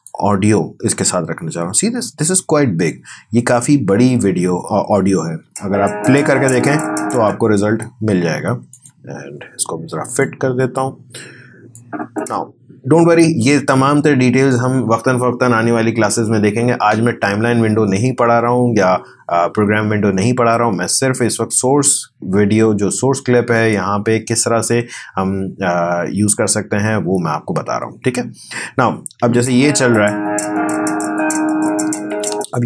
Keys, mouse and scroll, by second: 5.2 space, 7.2 space, 8.7-25.8 drag, 29.2 space, 32.2 space.